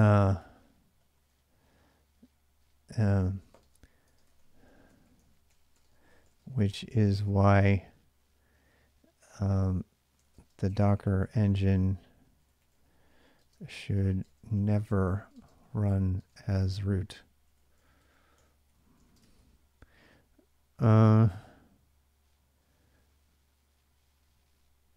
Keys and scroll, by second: 0.0-7.0 typing, 9.9-21.3 typing.